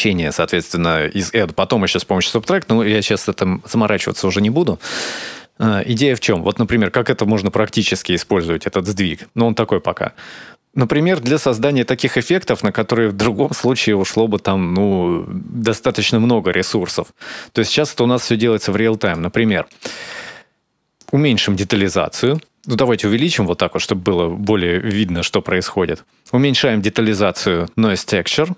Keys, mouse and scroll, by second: 5.1 shift+click, 11.9 middle click, 13.1-13.9 scroll up 1, 13.9 scroll up 1, 14.5-15.0 scroll down 1, 15.0-15.9 scroll up 2, 16.6 middle click, 18.8 click, 19.5 click, 20.7 click, 22.7 click.